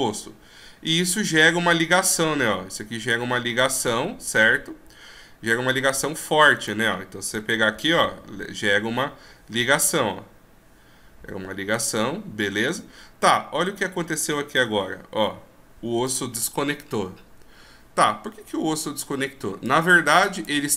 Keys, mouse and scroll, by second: 6.6 right click, 7.3 g, 13.7 right click, 14.5 g, 19.6 click.